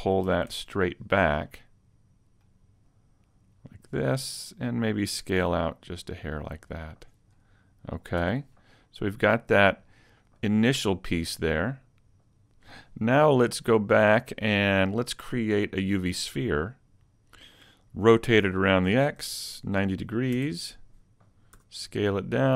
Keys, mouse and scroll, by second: 0.5 ctrl+alt+Left, 1.5 middle click, 3.2 click, 5.4 s, 7.0 click, 7.4 middle click, 8.2 Tab, 8.6 middle click, 13.8 KP_1, 15.9 click, 17.0 scroll down 5, 19.0 r, 21.6 s.